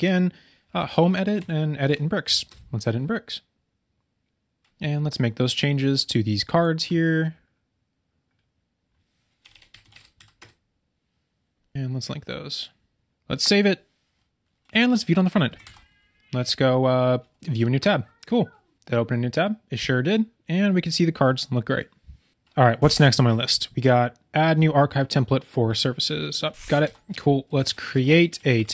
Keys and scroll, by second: 1.3 Down, 10.0 BackSpace, 15.6 super+k, 26.8 super+k.